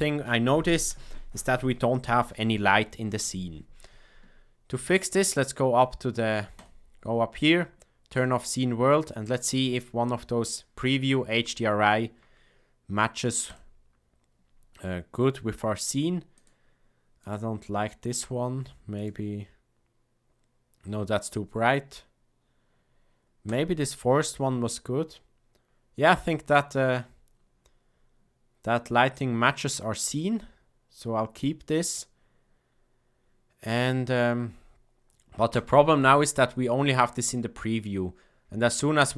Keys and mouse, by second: 6.5-13.9 drag, 16.3-25.3 drag, 35.5-39.1 drag.